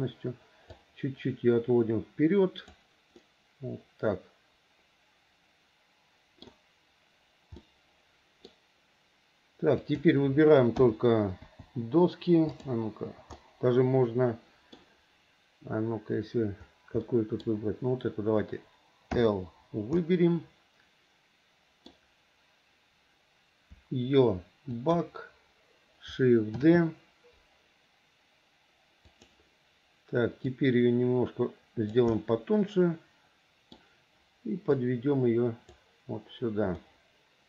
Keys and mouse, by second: 1.0-2.9 drag, 3.4-6.6 middle drag, 7.8 middle click, 11.0 l, 11.6 click, 12.8 click, 13.6 middle click, 14.4 click, 17.3 click, 19.3 click, 20.2-22.1 drag, 26.8 shift+d, 30.6 click, 30.9-32.1 drag, 32.3-33.9 middle drag, 35.1 click, 37.0-37.4 middle drag.